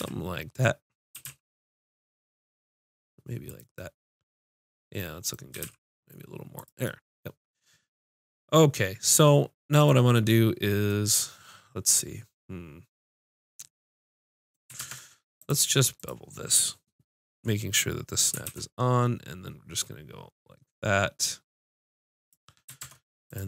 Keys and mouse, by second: 0.0 z, 1.1 s, 3.6-5.2 drag, 5.5 s, 6.8-8.5 drag, 14.8 ctrl+Tab, 16.0-17.9 drag, 18.5 ctrl+b, 21.8 click, 22.8 ctrl+Tab.